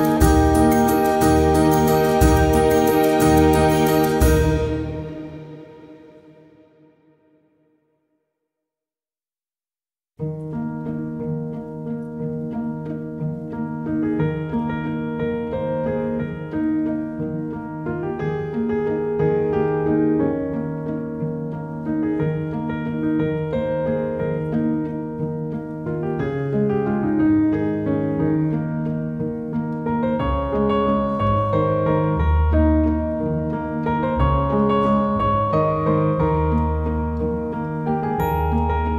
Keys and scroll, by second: 1.4 space.